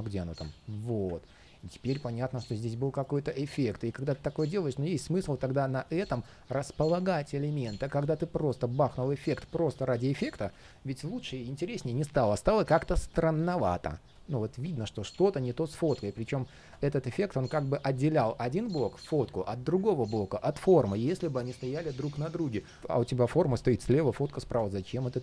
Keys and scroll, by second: 0.1 alt+super+v, 7.8 super+z.